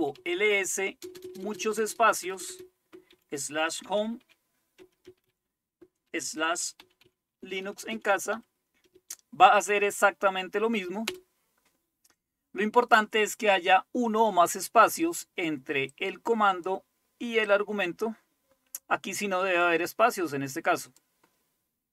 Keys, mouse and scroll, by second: 0.0-8.9 typing, 10.9-11.6 typing, 16.0 click, 17.5-19.7 drag, 20.8-21.9 drag.